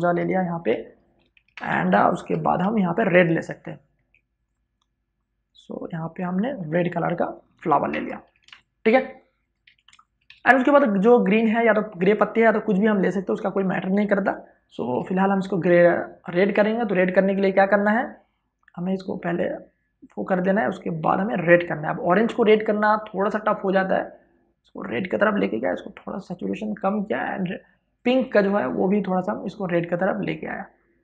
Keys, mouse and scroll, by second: 0.3 click, 1.3 alt+BackSpace, 2.4 v, 2.7 click, 3.7 w, 4.2 click, 7.3 click, 7.7 alt+BackSpace, 8.0 ctrl+d, 8.3 space, 8.7 ctrl+click, 9.4 v, 9.6 ctrl+space, 9.8 ctrl+click, 10.0 v, 11.7 click, 12.2 w, 12.4 click, 13.9 ctrl+d, 14.9 click, 18.8 click, 23.4-31.0 drag.